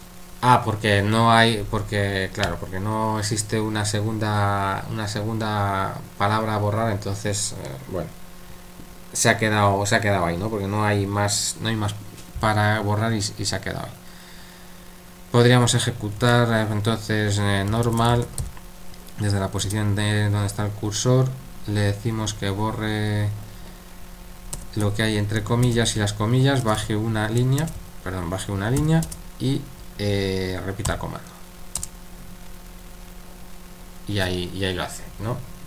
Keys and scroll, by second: 16.2 typing, 17.4-18.9 typing, 24.5-25.6 typing, 26.8-27.8 typing, 28.8 typing, 30.8 typing, 31.8 Return.